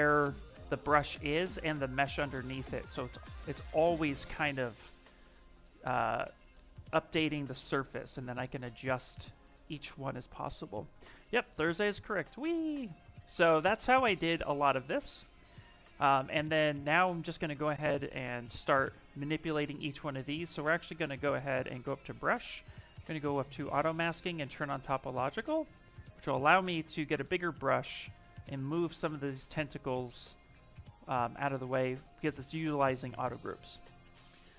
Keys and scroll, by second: 13.6 ctrl+z, 14.6 ctrl+z, 17.1-18.5 typing, 25.7 s.